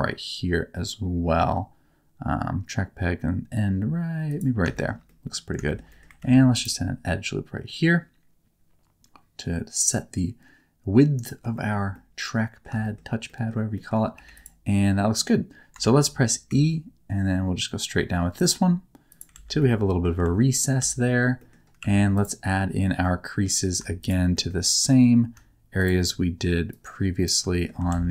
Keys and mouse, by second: 4.2 click, 4.7 shift+middle click, 5.0 middle click, 5.6 shift+middle click, 5.8 middle click, 6.1 ctrl+r, 11.1 click, 11.5 shift+middle click, 11.9 middle click, 12.8 shift+middle click, 13.2 middle click, 13.7 middle click, 14.1 3, 14.3 click, 14.8 middle click, 15.8 shift+middle click, 16.4 e, 19.1 click, 19.3 alt+z, 19.6 middle click, 20.2 alt+z, 20.8 alt+z, 21.3 middle click, 21.8 2, 23.0 middle click, 24.0 shift+click, 24.3 shift+middle click, 26.7 click, 27.5 shift+middle click, 27.9 alt+z.